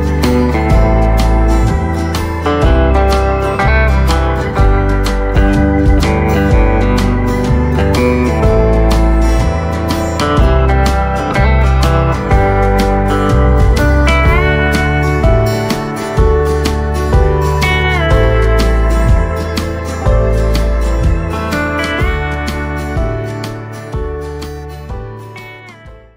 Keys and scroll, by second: 0.3 Tab, 7.6 space, 8.1 space, 12.1 v, 12.6 space, 13.1 space, 16.0 ctrl+space, 17.5 ctrl+space.